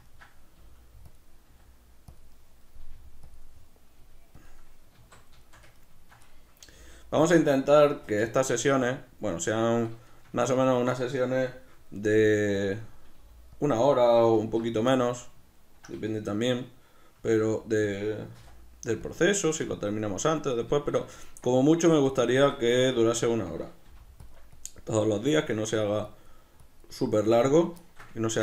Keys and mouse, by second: 0.6 g, 1.2 click, 1.4 s, 2.2 click, 2.2-3.3 middle drag, 2.8 g, 3.3 click, 3.4-4.4 middle drag, 4.0 g, 4.4 click, 4.9 alt+q, 5.4-7.2 shift+middle drag, 6.7 g, 7.2 click, 7.8-12.7 middle drag, 12.1 g, 12.7 click, 12.7 middle click, 13.1 g, 13.7 click, 13.8-17.9 middle drag, 14.4 alt+q, 17.2 s, 17.9 click, 18.4 r, 19.1 click, 19.3-21.8 shift+middle drag, 21.8 right click, 22.4 Tab, 22.5 b, 22.8-24.3 ctrl+middle drag, 24.3 click, 27.9 ctrl+shift+middle click.